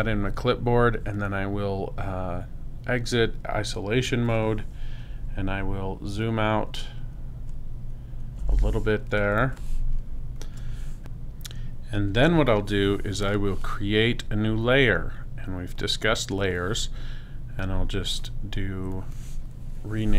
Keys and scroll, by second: 6.0 super+-, 9.5 super+space.